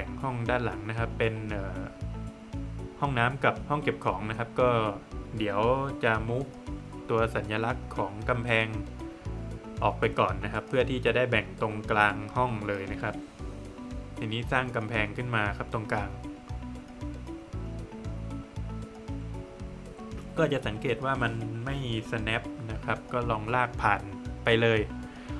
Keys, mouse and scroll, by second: 0.6 scroll up 1, 1.4 middle click, 2.4 middle click, 6.4 space, 7.0 click, 10.7 click, 13.1 click, 23.1 click, 25.2 space.